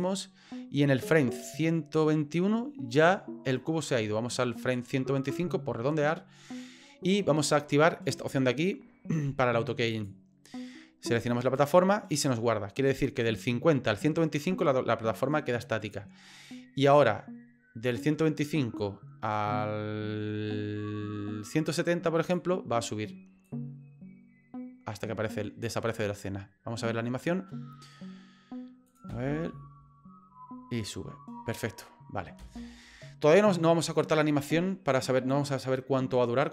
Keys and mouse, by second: 0.0-5.3 drag, 9.9 click, 11.6 click, 16.8-22.3 drag, 23.5-25.7 drag, 28.9 click, 29.1 space, 32.4 space, 35.0-36.5 drag.